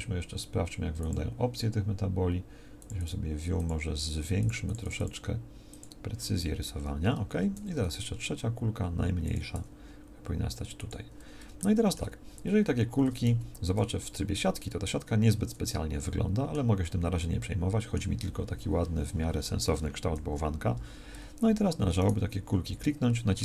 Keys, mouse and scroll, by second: 7.5 shift+d, 9.5 s, 13.2 z, 20.2 KP_1.